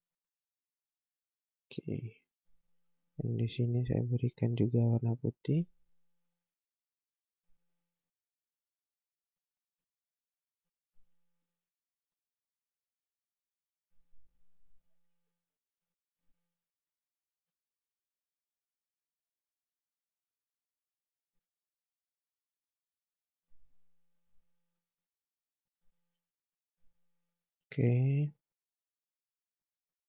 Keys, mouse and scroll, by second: 0.5 right click, 1.3 scroll down 1, 1.7 scroll up 1, 2.1 space, 2.4 scroll up 1, 3.4 click, 12.0 space, 12.8 click, 13.7 right click, 15.4 scroll down 1, 16.0 click, 16.1 click, 16.5 scroll up 1, 17.3 space, 18.4 click, 26.0 space, 27.0 click, 27.9 right click, 28.4 scroll down 1, 28.9 click, 29.9 scroll up 1.